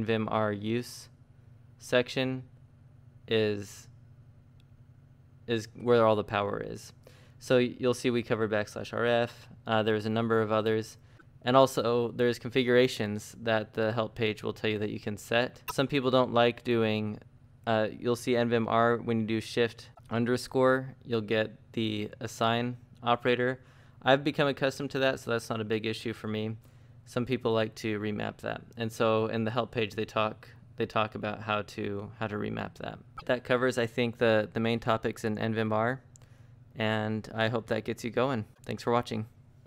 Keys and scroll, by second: 0.1-3.1 typing, 0.5 Up, 4.8 ctrl+d, 7.3 shift+o.